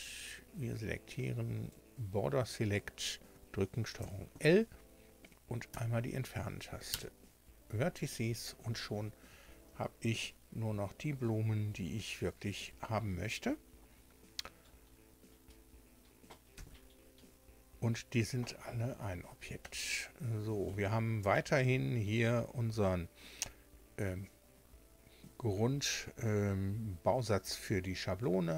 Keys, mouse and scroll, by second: 3.9 ctrl+l, 5.6 Delete, 6.8 Return, 16.5 Tab, 19.5-20.8 middle drag, 22.1 right click.